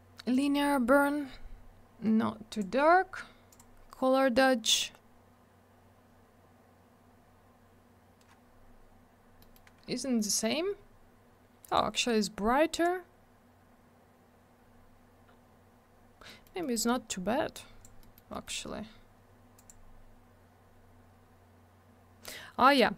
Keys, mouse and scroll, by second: 0.3 click, 0.4 click, 2.5 click, 2.6 click, 3.5 click, 3.6 click, 9.4 middle click, 9.5 middle click, 10.2 click, 10.3 click, 11.7 click, 11.7 click, 13.0-14.3 scroll up 1, 14.6-15.8 scroll down 1, 16.3 middle click, 16.4 middle click, 16.6 middle click, 16.7 double middle click, 16.9 middle click, 17.1 middle click, 17.5 click, 18.0 middle click, 18.1 middle click, 18.3 middle click, 18.4 double middle click, 19.6 click, 19.7 click, 21.0 scroll up 1.